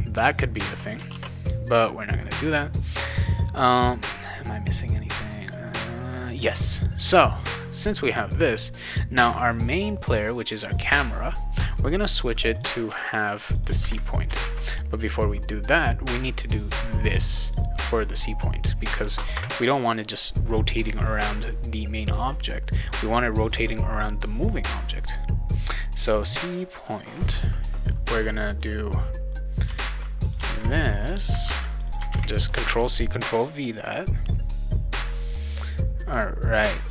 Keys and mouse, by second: 1.1 ctrl+s, 7.7 click, 8.5 click, 8.7 click, 12.3 click, 12.5 click, 12.8 ctrl+c, 13.5 click, 13.6 ctrl+click, 13.8 ctrl+v, 14.4 ctrl+s, 14.6 click, 15.6-17.1 drag, 18.3 click, 19.3 Return, 28.6-29.6 drag, 29.8 ctrl+c, 30.2 click, 30.5 ctrl+v, 31.0 click, 31.1 click, 31.4 ctrl+c, 31.7 click, 31.8 click, 32.1 ctrl+v.